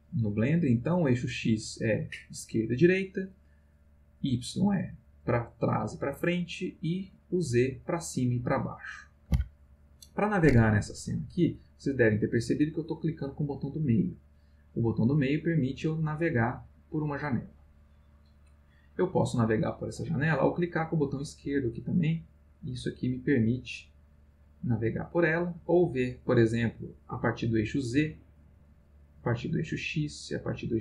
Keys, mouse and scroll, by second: 3.0 middle click, 3.4 middle click, 8.7-9.8 middle drag, 11.1-12.3 middle drag, 13.0-18.8 middle drag, 19.1-20.1 middle drag, 21.3-25.6 drag, 27.6 click, 29.6 click, 30.7 click.